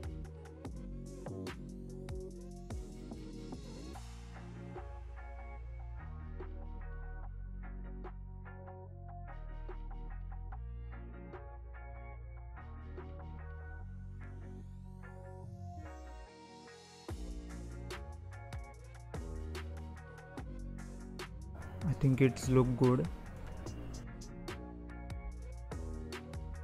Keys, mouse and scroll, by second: 0.8-8.8 drag, 8.8-9.6 scroll down 4, 9.6-10.2 scroll up 1, 10.2 scroll up 1, 10.3 click, 10.9 click, 13.8 0, 15.4 click, 17.1-19.6 drag, 19.6 r, 24.8-25.6 scroll up 1, 25.6-26.2 scroll up 1, 26.2-26.6 scroll up 1.